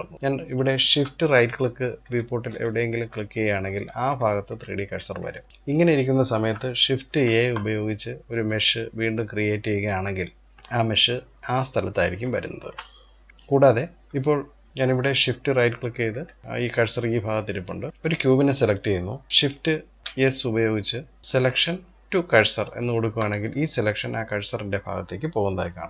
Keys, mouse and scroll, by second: 0.1-1.1 scroll down 2, 1.1 shift+right click, 1.6 shift+right click, 2.1 shift+right click, 2.6 shift+right click, 3.3-3.8 shift+right drag, 4.1 shift+right drag, 4.5 shift+right drag, 4.8 shift+right click, 6.7 shift+a, 10.5-11.4 middle drag, 11.4-11.9 scroll up 1, 11.9-14.5 shift+middle drag, 15.7 shift+right click, 16.4-17.9 middle drag, 17.9 click, 19.8 shift+s, 25.7 ctrl+z.